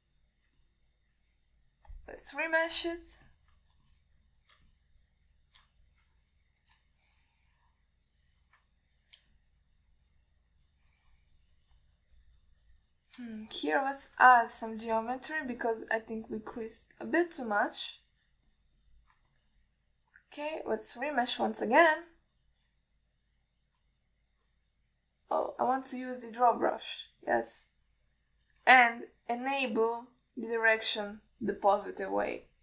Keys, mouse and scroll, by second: 0.4 alt+middle click, 0.9 click, 1.9 alt+middle click, 2.4 click, 3.5-4.2 drag, 4.5 alt+middle click, 5.1 ctrl+alt+middle click, 5.5 alt+middle click, 5.9 shift+click, 7.3 KP_1, 8.2-9.8 ctrl+alt+middle drag, 10.6 shift+click, 11.9-14.4 shift+drag, 15.2 click, 15.7 middle click, 16.2 click, 16.7 click, 17.1 click, 17.5 click, 17.8 click, 18.3 click, 18.6 alt+middle click, 19.4 click, 19.7 click, 20.1 click, 20.6 middle click, 21.7-22.6 drag, 22.8 middle click, 23.3 click, 25.2 middle click, 26.9 ctrl+z, 27.6 click, 28.5 click, 29.7 ctrl+z, 31.9 click.